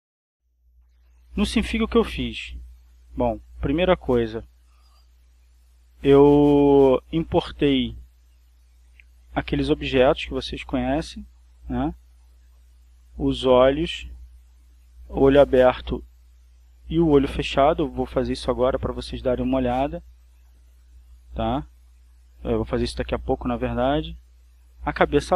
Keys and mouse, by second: 0.7 click, 7.3-8.3 drag, 9.4-10.6 drag, 11.1 click, 22.1 click, 24.0 click.